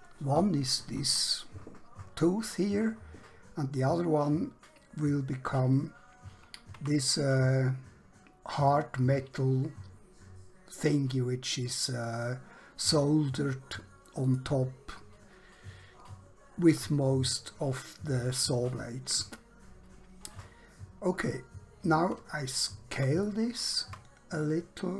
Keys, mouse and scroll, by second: 6.8 Tab, 14.2 click, 21.3 scroll up 1, 22.0-22.4 scroll down 1, 22.6 shift+middle click, 23.8 Tab.